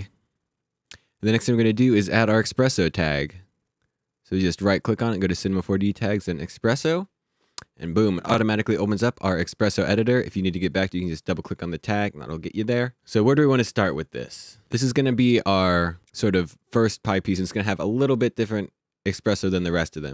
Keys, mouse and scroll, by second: 1.7 right click, 6.1 click, 11.0 click, 14.7 click.